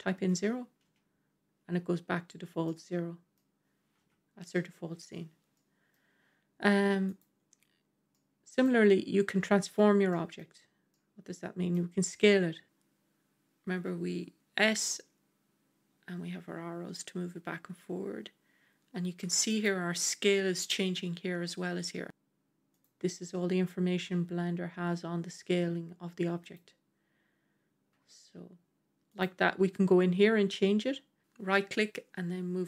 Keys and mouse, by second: 2.5-3.3 middle drag, 3.9 KP_1, 5.4-5.8 middle drag, 8.0-8.5 middle drag, 10.0 middle click, 10.1 typing, 10.8-11.6 middle drag, 13.6 s, 22.1 s, 22.6 s, 25.4 s, 26.3 s, 27.8 s, 31.2-32.6 drag.